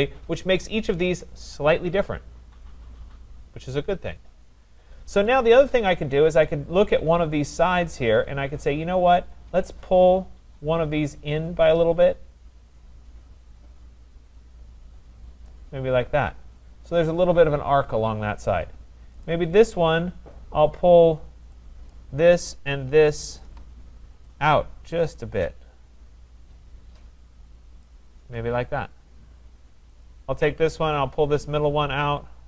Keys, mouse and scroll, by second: 5.3 click, 6.4-8.1 scroll, 15.5 click, 17.9 scroll, 19.3 click, 19.9 click, 21.9 click, 23.4 shift+click, 27.8 click, 30.0 click, 30.9 click.